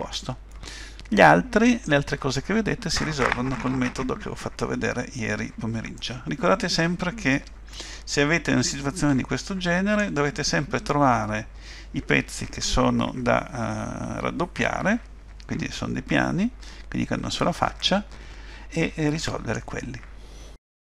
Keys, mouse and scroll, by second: 0.3-1.2 scroll down 2, 1.2 middle click, 6.0 middle click, 17.8 middle click.